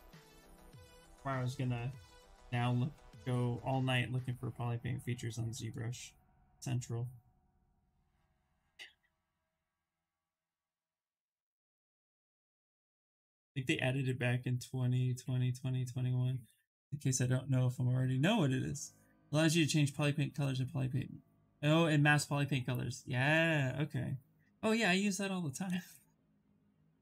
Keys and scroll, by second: 1.7 b, 2.1 v, 13.2 s.